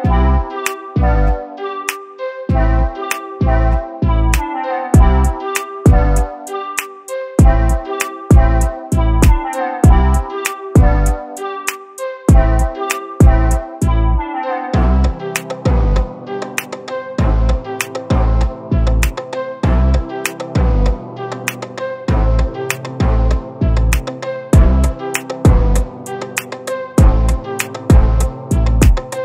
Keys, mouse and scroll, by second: 0.3 click, 2.9 click, 3.6 scroll down 1, 4.2 click, 5.0-5.6 scroll up 2, 5.6 click, 6.8-7.3 scroll down 1, 7.3 click, 7.7-8.6 scroll down 1, 8.9 s, 9.7 click, 10.5 click, 10.7-11.2 scroll down 3, 11.4 click, 12.7 click, 13.8 click, 14.5 click, 15.1 click, 16.0 click, 16.2 scroll up 2, 16.8 scroll up 4, 16.8 click, 17.7 click, 18.5 click, 19.2-20.4 drag, 21.4 click, 22.9 click, 23.4 click, 23.9-24.3 scroll up 2, 24.3 click, 25.0 click, 25.7-26.0 scroll up 1, 26.0 click, 26.7 click, 27.2 scroll down 2, 28.0 click, 29.1 scroll down 1.